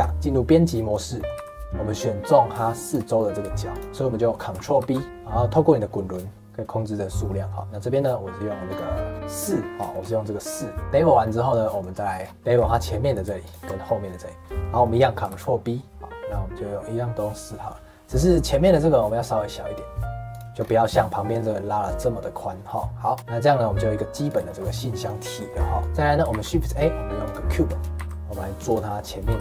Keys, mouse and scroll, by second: 0.1 Tab, 1.1 middle click, 1.3 2, 1.9 click, 2.2 middle click, 2.8 shift+click, 3.1 middle click, 3.7 shift+click, 3.8 middle click, 4.8 ctrl+b, 9.1 click, 9.9-12.2 shift+middle drag, 12.2 scroll up 2, 12.3 2, 12.7 alt+click, 13.4 alt+shift+click, 13.8-15.2 middle drag, 15.2 ctrl+b, 20.6 scroll down 1, 22.6-24.2 middle drag, 24.2 click, 24.4 shift+middle click, 24.9 click, 25.3 shift+middle click, 25.8 click, 25.8 middle click, 26.3 shift+a, 27.5 middle click, 27.9 s, 28.8 middle click, 29.3 g.